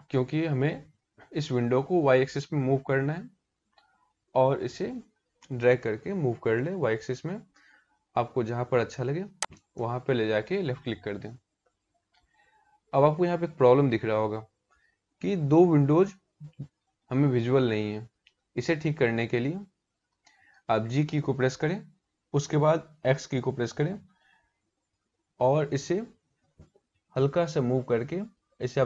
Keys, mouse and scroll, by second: 18.2 middle click, 22.1 g.